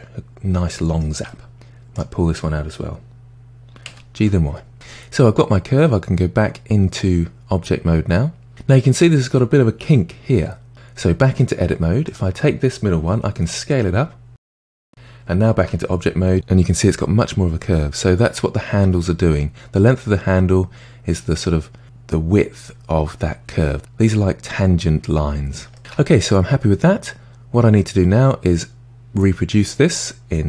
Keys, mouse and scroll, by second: 1.9 drag, 3.9 g, 4.7 Tab, 5.1-8.1 middle drag, 11.3 Tab, 12.1 click, 13.3 s, 15.6 Tab, 18.7 Tab, 25.7 middle click, 25.9 Tab.